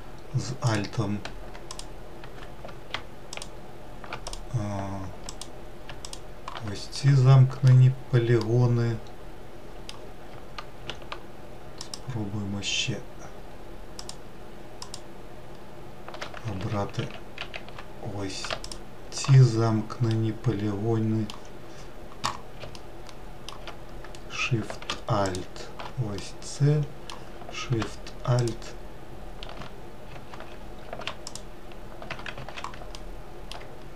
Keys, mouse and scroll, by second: 0.0 alt+click, 1.1 click, 2.7 alt+shift+click, 3.6 alt+click, 4.6 click, 5.4 alt+click, 6.3-10.8 middle drag, 11.2 alt+shift+click, 13.3 alt+shift+click, 14.2 alt+shift+click, 15.9 ctrl+z, 16.3 ctrl+z, 16.7 ctrl+z, 18.0 alt+shift+click, 19.4-23.4 middle drag, 23.4-23.9 scroll up 1, 24.6 alt+shift+click, 25.6-27.8 middle drag, 27.8 alt+shift+click, 29.6 ctrl+z, 30.6 alt+shift+click, 31.7 ctrl+z, 32.3 alt+middle click, 33.4-33.9 middle drag.